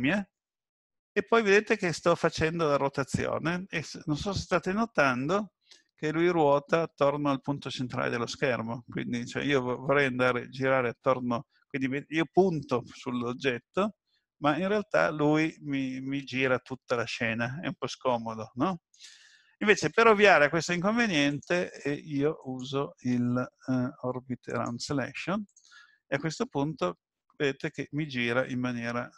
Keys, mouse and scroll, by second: 0.3 middle click, 13.1 middle click, 21.3 click, 26.9 middle click.